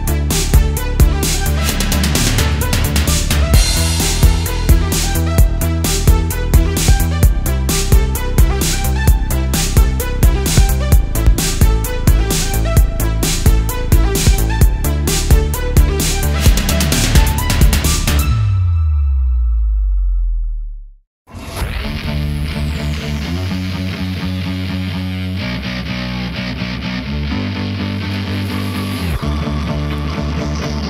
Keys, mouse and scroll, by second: 0.6 ctrl+r, 1.8 right click, 2.4 Tab, 3.8-4.4 middle drag, 4.7 Tab, 5.9 3, 6.1 click, 6.6 shift+click, 7.0 shift+click, 7.4 shift+click, 9.8 s, 12.6 click, 12.9 Tab, 13.4-13.9 scroll down 2, 13.9-14.3 middle drag, 14.6 click, 15.0 middle click, 15.6-16.1 shift+middle drag, 16.4 Tab, 16.6-17.0 scroll up 1, 17.0 click, 17.7 shift+click, 18.2 shift+click, 18.6 shift+click, 20.0 shift+d, 20.5 right click, 21.7 p, 22.8 Tab, 24.8 click, 26.0 Tab, 26.8 a, 27.2 scroll down 1, 27.4 middle click, 29.0 e.